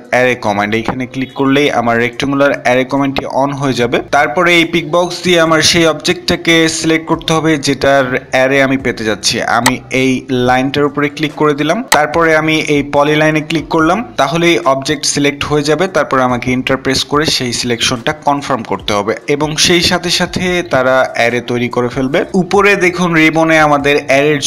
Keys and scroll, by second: 15.9 Return.